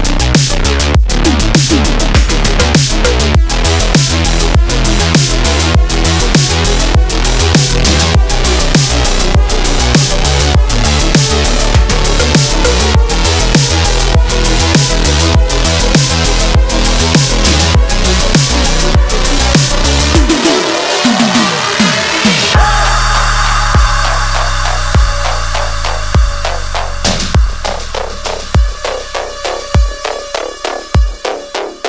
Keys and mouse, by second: 0.8-1.9 drag, 0.8-1.9 right drag, 3.4 click, 5.1 Tab, 5.6 1, 7.0 shift+middle click, 8.5-9.9 drag, 11.1 x, 14.3 click, 15.9 shift+middle click, 17.2 shift+click, 18.6 g, 23.0 e, 30.3 shift+click, 31.3 f.